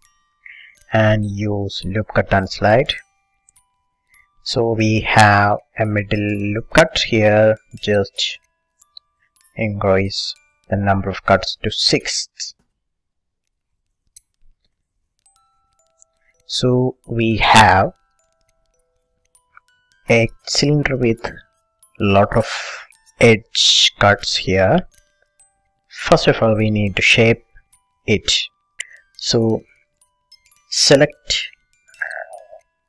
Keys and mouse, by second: 0.2-2.1 middle drag, 2.1-3.9 drag, 5.3-8.1 middle drag, 11.4-14.4 drag, 14.4 middle click, 14.7 middle click, 14.9 middle click, 15.5 click, 15.7 middle click, 16.3 a, 17.2-19.0 middle drag, 19.9-22.3 middle drag, 22.5-24.2 middle drag, 24.4-25.6 middle drag, 25.9 middle click, 26.5-32.5 middle drag, 32.5 b.